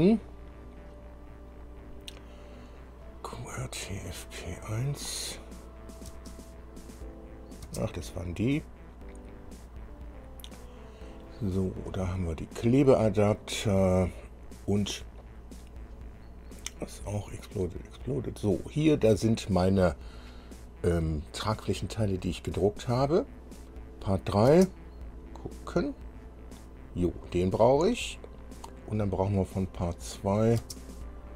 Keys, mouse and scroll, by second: 5.3 click, 6.4 space, 7.9 space, 9.0 scroll up 2, 9.6-9.9 scroll up 2, 10.3 scroll up 2, 11.2-11.6 scroll up 2, 12.4-13.0 scroll up 2, 13.6-13.9 scroll up 2, 15.2 scroll up 1, 16.3 scroll up 1, 17.4-17.8 scroll up 1, 18.3 scroll up 1, 24.0 click, 24.7 space, 29.9 click, 30.9 space.